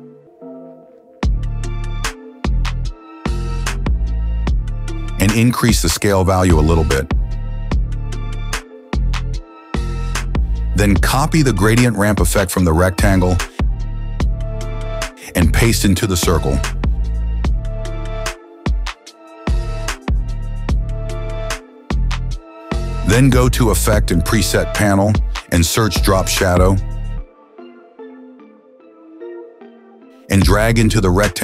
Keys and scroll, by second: 6.5 s, 17.9 ctrl+v, 26.8-28.1 typing.